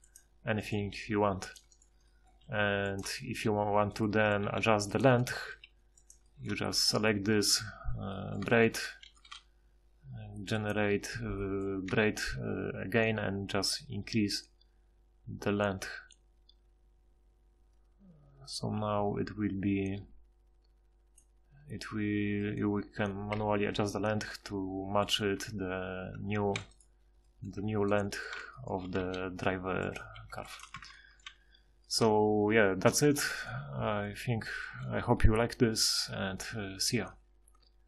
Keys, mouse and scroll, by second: 0.8 g, 2.4 g, 4.4 g, 5.5 g, 6.7 Tab, 8.9 ctrl+shift+h, 11.9 F6, 14.5 F6, 15.4 F6, 25.3 Tab, 26.1 Tab, 26.5 z, 27.6 Tab, 29.0 g, 30.8 Tab, 31.3 z, 33.6 a.